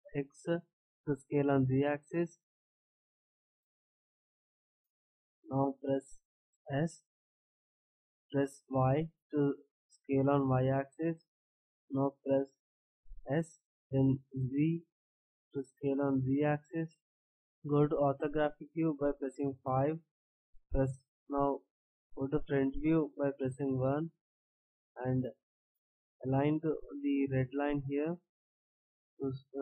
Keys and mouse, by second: 6.9 s, 13.2 s, 17.2 middle click, 25.7-27.2 drag.